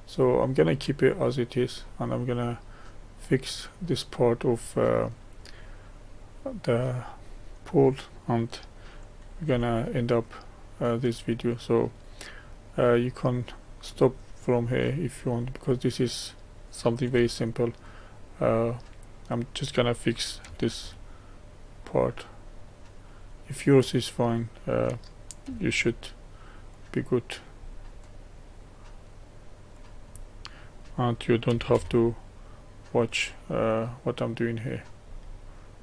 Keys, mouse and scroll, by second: 1.1-1.9 scroll down 2, 1.9-4.1 middle drag, 4.1 click, 4.6 middle click, 5.5-6.7 scroll up 2, 6.7-7.4 scroll up 1, 7.4-9.5 middle drag, 9.5 Tab, 13.4 click, 14.3-17.1 middle drag, 17.1 1, 18.1 click, 18.5-20.5 middle drag, 20.5 g, 22.5-24.3 middle drag, 24.3 click, 25.5 g, 27.7-29.9 middle drag, 29.9 click, 30.2-31.5 middle drag, 31.5 g, 34.8 click, 35.2-35.8 middle drag.